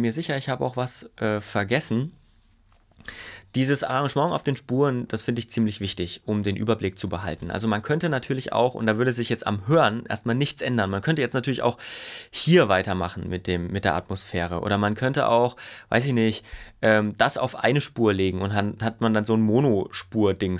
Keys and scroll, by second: 14.6 super+y.